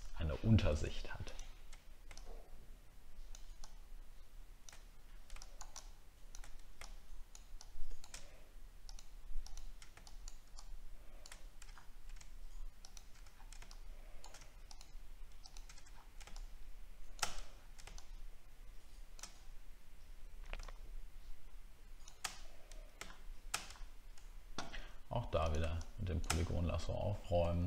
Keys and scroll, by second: 0.0 alt+scroll up 1, 11.6 alt+scroll up 1, 13.2 alt+scroll down 1, 15.8 alt+scroll down 1, 17.5 alt+scroll down 1, 23.7-24.8 alt+scroll up 8, 26.4 alt+scroll up 11, 27.0 alt+scroll up 1.